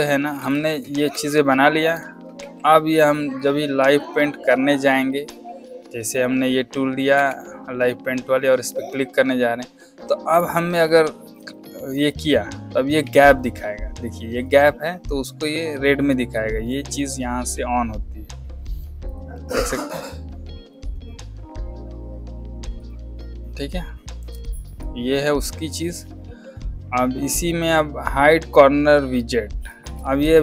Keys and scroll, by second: 0.3 space, 2.3 a, 7.1 v, 13.0 z, 24.2 space, 29.8 space.